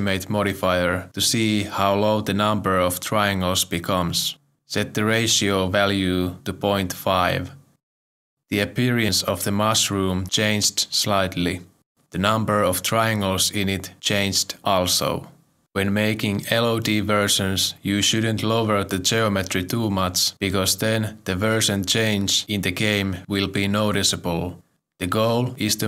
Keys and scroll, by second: 6.4 Return, 7.2 5, 8.4 Return.